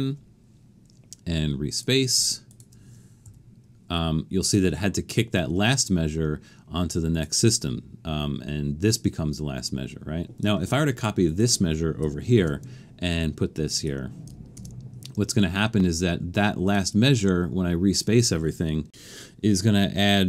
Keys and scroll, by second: 12.4 super+c, 14.6 super+v.